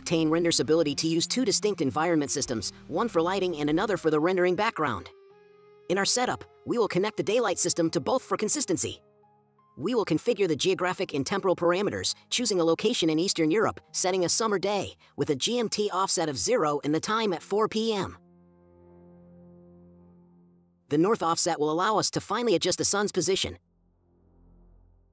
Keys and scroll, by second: 14.8 KP_8, 15.0 Return, 17.0 KP_1, 17.7 KP_5, 17.9 Return, 19.6 KP_0, 19.7 Return, 20.6 KP_1, 20.7 KP_6, 20.8 Return.